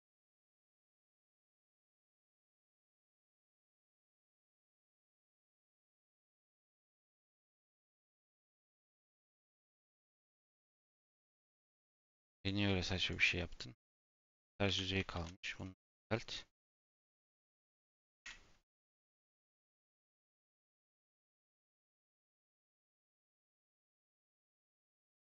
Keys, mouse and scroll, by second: 0.0 click, 0.2-0.6 scroll up 1, 0.6 scroll down 2, 2.2 click, 3.1 click, 4.8-5.4 drag, 5.5 scroll up 1, 5.7 z, 6.2-6.6 scroll up 2, 6.6 shift+middle click, 7.1 shift+click, 7.5 Tab, 8.0 ctrl+r, 8.7 ctrl+r, 9.8 ctrl+z, 10.0 ctrl+z, 10.4 Tab, 10.8 click, 11.2 a, 13.0-13.5 drag, 14.2 Tab, 14.6 a, 15.5 alt+n, 15.7 Tab, 16.3 click, 16.6-17.1 shift+middle drag, 17.1 a, 17.9 ctrl+a, 18.2 ctrl+shift+e.